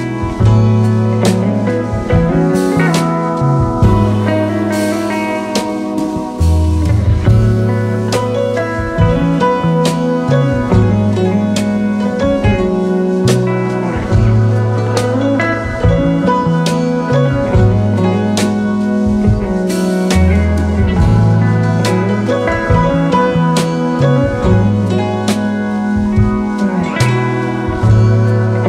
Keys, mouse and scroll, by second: 5.2 double click, 15.1 double click, 27.2-27.8 scroll down 1, 27.8-28.6 scroll up 1.